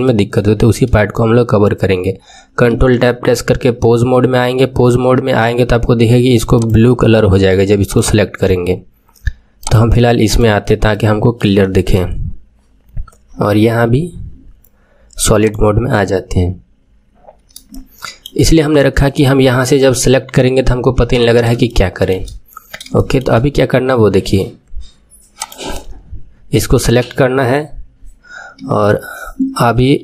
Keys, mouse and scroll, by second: 2.6 ctrl+Tab, 6.5 click, 7.8 click, 9.6 click, 10.8-13.2 middle drag, 13.2-15.2 scroll down 15, 15.2 scroll down 1, 15.4 click, 16.8-17.6 scroll up 1, 17.6-20.7 shift+middle drag, 20.7 KP_3, 21.6-22.6 shift+middle drag, 22.6-22.9 scroll down 1, 22.9-25.4 shift+middle drag, 25.4 click.